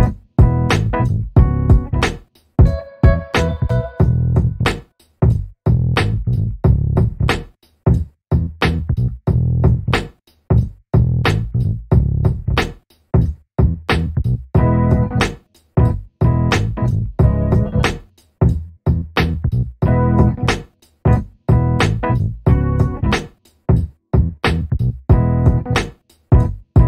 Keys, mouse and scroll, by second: 2.6 1, 3.0 8, 3.5 Return, 4.5 alt+middle click, 5.1-5.7 scroll up 1, 5.7 alt+middle click, 7.4 alt+click, 14.5 double click, 14.9-15.7 scroll up 1, 15.7 click, 16.9-18.3 scroll up 1, 18.3 click, 18.8 shift+v, 20.0 alt+click, 25.6 double click, 26.7 click.